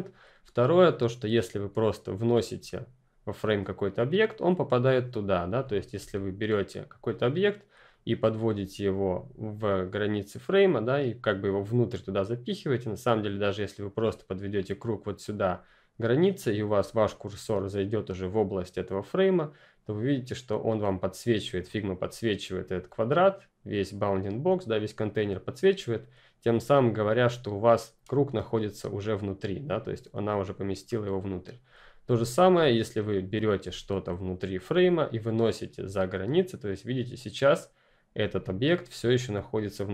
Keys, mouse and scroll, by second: 5.6 click, 31.3 click, 33.0 ctrl+click, 35.4 click.